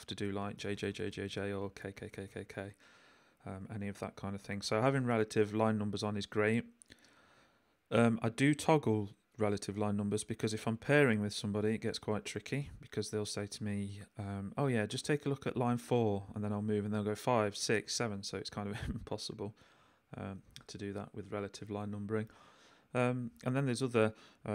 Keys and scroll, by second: 0.4 j, 1.6 k, 3.6 j, 5.8 l, 7.3 j, 8.1 k, 12.2 h, 16.0 j, 17.8 k, 23.6 h, 24.4 j.